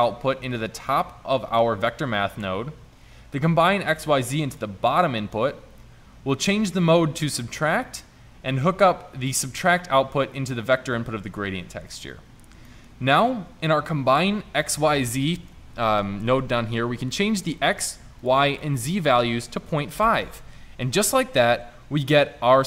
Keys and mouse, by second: 15.3-16.8 middle drag, 22.0-22.6 drag.